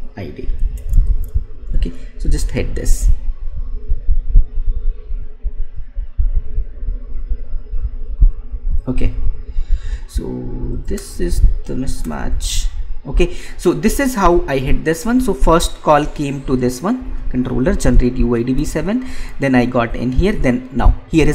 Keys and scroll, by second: 1.6 ctrl+v, 11.2 Right.